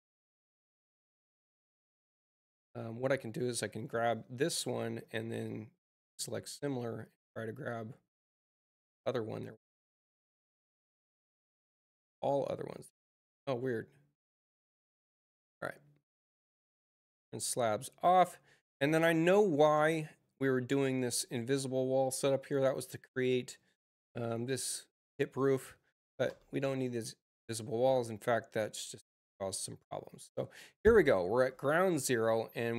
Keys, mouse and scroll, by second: 0.0 click, 0.9 Return, 2.4 click, 4.6 click, 5.3-7.0 drag, 10.1 click, 11.2 click, 13.3 space, 14.2 click, 16.0 click, 17.3 space, 18.5 click, 20.7 click, 21.9 ctrl+click, 29.2-29.8 scroll down 1.